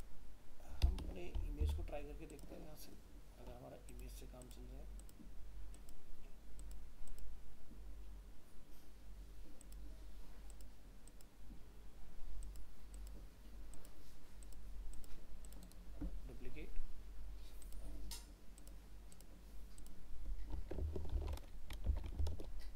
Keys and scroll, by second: 22.3 ctrl+alt+0.